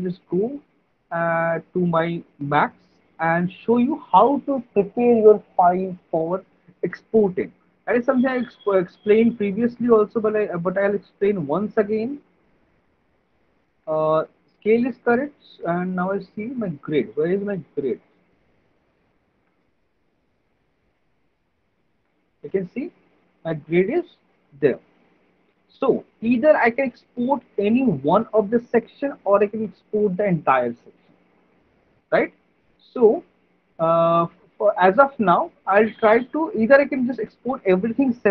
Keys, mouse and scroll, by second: 0.2 click, 2.3 click, 3.4 click, 8.3 alt+middle click, 9.0 alt+click, 10.1 alt+middle click, 11.0 middle click, 12.2 alt+middle click, 14.3 middle click, 14.8 middle click, 15.7 alt+middle click, 16.3 middle click, 16.6 middle click, 16.9 alt+middle click, 18.0 click, 19.1 middle click, 19.6 F4, 22.6 alt+middle click, 24.0 alt+middle click, 26.1 middle click, 34.6 alt+middle click, 35.0 middle click, 36.0 alt+middle click, 36.6 middle click.